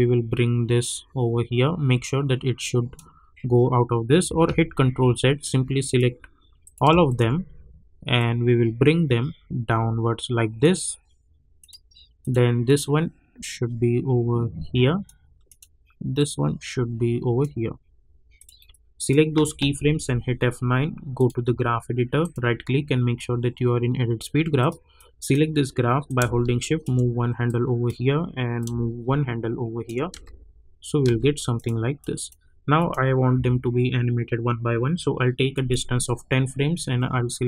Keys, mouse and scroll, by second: 4.4 ctrl+z, 5.8 click, 7.0-19.9 shift+drag, 19.9 F9, 21.1 click, 22.2 right click, 24.5-27.4 drag, 27.4-30.1 drag, 30.1 space, 31.5 click, 33.3 =, 35.6 click.